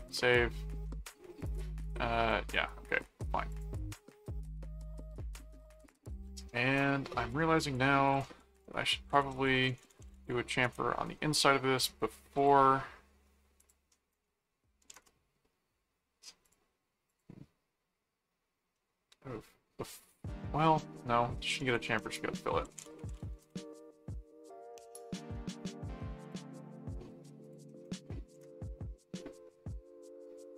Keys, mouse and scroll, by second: 1.4 click, 3.5 click, 4.4-5.5 middle drag, 5.7 click, 7.3 click, 8.1 click, 8.5-10.8 typing, 12.3 click, 13.6 click, 16.4 click, 17.1 click, 18.7-20.1 middle drag, 21.7 Return, 22.3-23.6 typing, 26.3 click, 27.4 click.